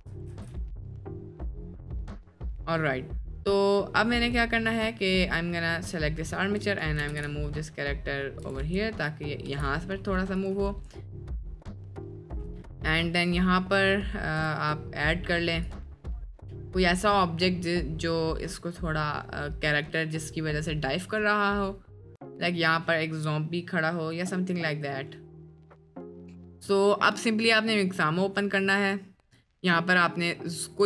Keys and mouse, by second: 0.4 ctrl+s, 1.1-1.7 middle drag, 2.1 middle click, 2.9 middle click, 4.6 click, 5.3-5.9 middle drag, 6.2-6.6 middle drag, 7.0 g, 8.6 space, 9.4 space, 10.4-11.1 drag, 12.1 drag, 14.5 click, 15.7 click, 26.6-27.9 drag.